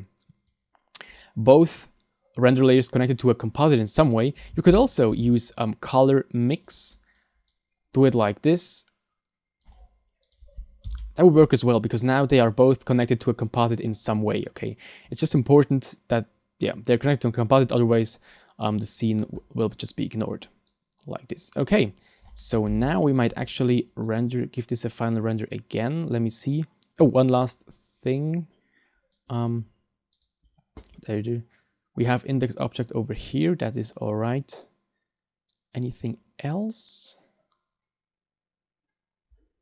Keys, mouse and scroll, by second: 29.2 click.